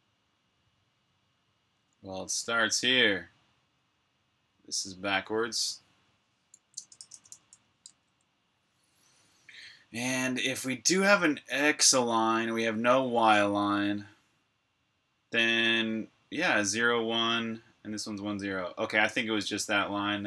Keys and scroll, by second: 6.5-7.2 typing, 7.8 super+s.